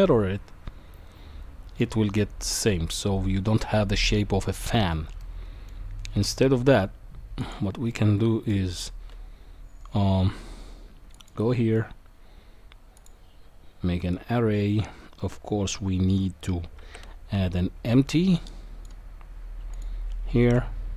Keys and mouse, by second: 5.2-5.7 middle drag, 7.9-8.5 middle drag, 11.2-13.1 drag, 16.8 shift+a.